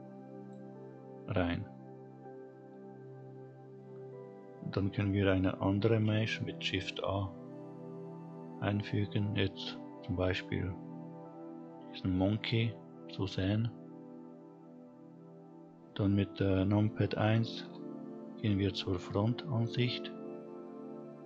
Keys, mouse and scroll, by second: 0.1 scroll down 2, 0.5-3.3 scroll up 2, 4.5 shift+a, 16.3 KP_1, 17.3-18.8 scroll up 3, 18.8-19.3 scroll up 2.